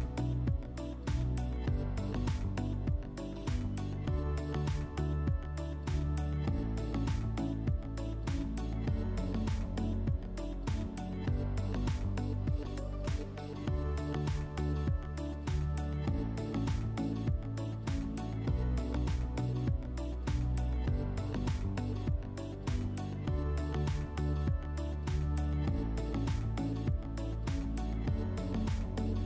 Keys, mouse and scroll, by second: 0.5 click, 2.1 click, 4.8 click, 7.6 click, 8.3 click, 8.8 click, 9.2 click, 9.5 click, 9.7 click, 9.9 click, 10.2 click, 10.8 click, 13.4 click, 14.6 click, 16.0 alt+w, 17.5 click, 18.8 ctrl+click, 20.4 ctrl+click, 24.5 right click, 27.5 click, 27.7 click, 28.4-29.2 typing.